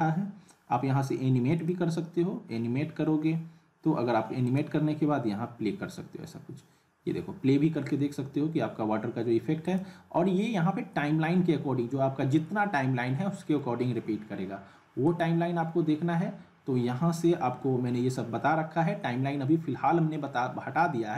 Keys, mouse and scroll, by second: 4.5 click, 9.6 click, 15.1 right click.